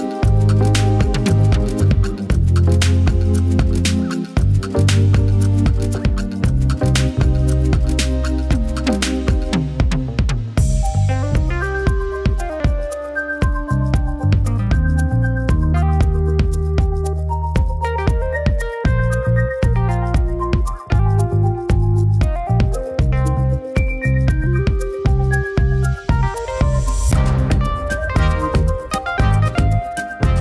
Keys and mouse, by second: 0.8 typing.